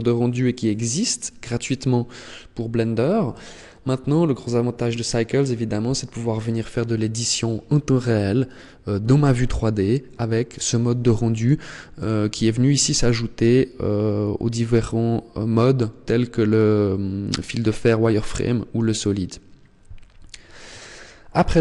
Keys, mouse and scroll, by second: 11.7 click, 20.9-21.6 scroll up 11.